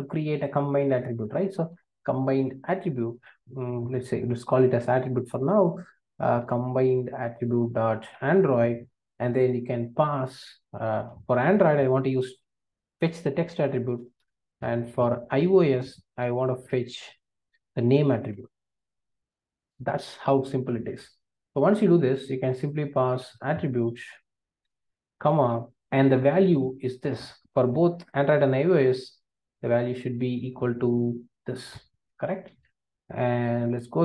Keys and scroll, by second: 3.4 Return, 7.2 Return, 16.2 Return, 24.6 Return, 32.4 super+c.